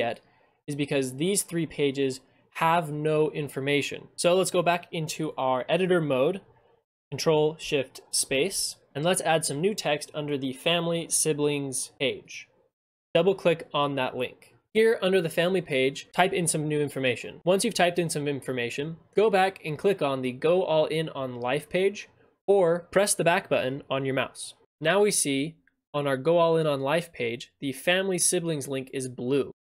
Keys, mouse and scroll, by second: 7.0 click, 12.4 click.